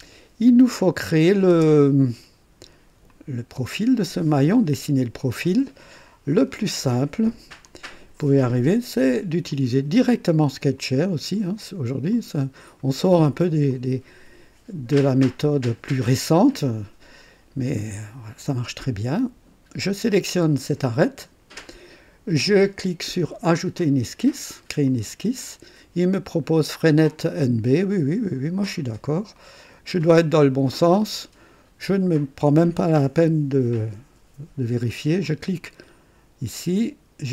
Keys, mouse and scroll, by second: 1.2 click, 1.6 space, 3.0 click, 3.6 space, 7.6 click, 10.9 click, 12.1 click, 13.0 right click, 13.7-15.4 drag, 15.4-16.1 right drag, 16.5-17.3 drag, 19.8 click, 24.8 click, 28.1 click, 29.3-30.2 right drag, 30.4-30.8 scroll up 1, 31.1-32.0 right drag, 35.2 click.